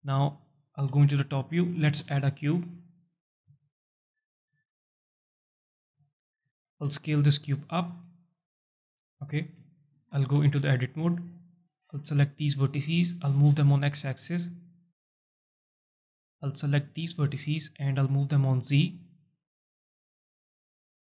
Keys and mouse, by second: 0.7 KP_7, 2.0 shift+a, 3.5 g, 4.2 click, 4.5 z, 5.7 g, 6.1 click, 6.6 shift+click, 6.8 s, 7.4 click, 8.3 KP_1, 9.6 alt+shift+drag, 10.1 Tab, 10.4 z, 11.4 click, 12.6-14.2 drag, 14.6 alt+shift+middle click, 14.9 click, 15.2 click, 16.7-18.8 drag, 19.3 click, 20.9-21.1 drag.